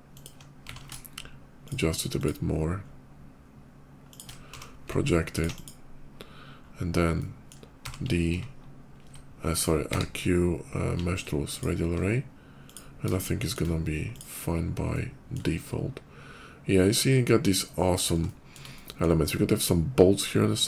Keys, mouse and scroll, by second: 0.0 ctrl+click, 0.4 d, 1.5 click, 2.0 click, 3.9 ctrl+shift+click, 4.4 d, 4.9 alt+d, 5.2 alt+click, 5.4 alt+click, 6.9 alt+middle click, 7.5 d, 8.3 ctrl+shift+d, 9.4 ctrl+shift+click, 9.7 q, 11.4 ctrl+click, 12.4 ctrl+click, 13.0 shift+middle click, 13.9 shift+click, 14.4 shift+middle click, 14.7 shift+middle click, 15.4 shift+middle click, 16.5 middle click, 17.6 middle click, 18.1 shift+middle click, 18.6 shift+middle click, 20.4 shift+middle click.